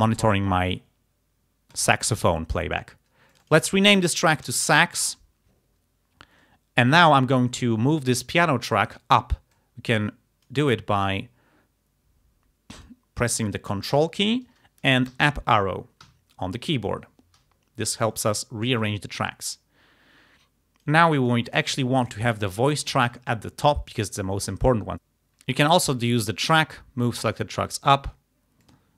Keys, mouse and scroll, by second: 1.7 click, 3.4 click, 4.1-5.3 typing, 7.1 click, 9.5-10.7 drag, 11.0 right click, 12.8 click, 15.3 ctrl+Up, 16.0 ctrl+Up, 18.8 click, 19.7-21.1 drag, 22.0 click, 26.0 click, 27.4 click, 28.7 click.